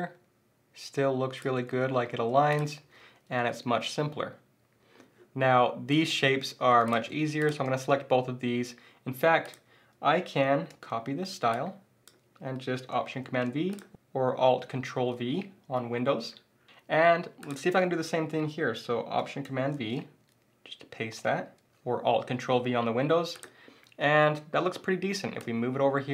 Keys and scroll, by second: 2.0 alt+shift+super+z, 2.6 shift+super+z, 10.7 super+c, 13.2 alt+super+v, 19.7 alt+super+v.